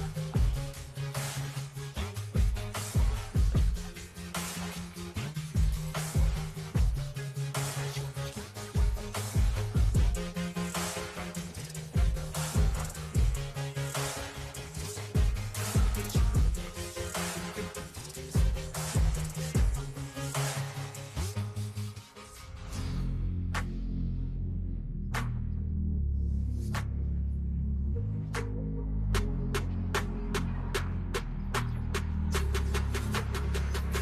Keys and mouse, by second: 0.6 click, 2.0 t, 6.2 click, 7.6-9.7 typing, 13.7 click, 14.6 click, 17.2 click, 18.3 v, 19.7 i, 20.5 r, 21.5 click, 23.2 click, 24.8-26.2 drag, 28.3 click, 30.1 click, 32.6 click, 33.9 KP_5.